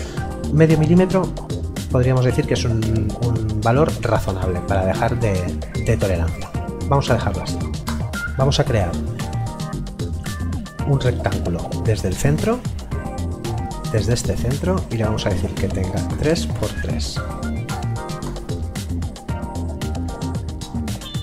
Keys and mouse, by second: 7.9 Return, 9.1 click, 12.1 click, 16.1 KP_3, 16.3 Tab, 16.5 KP_3, 17.7 Return, 21.0 click.